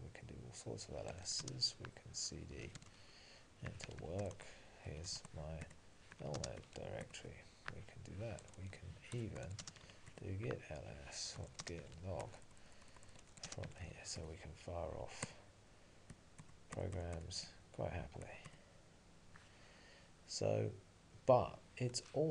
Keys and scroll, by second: 4.4 Tab, 5.7 Return.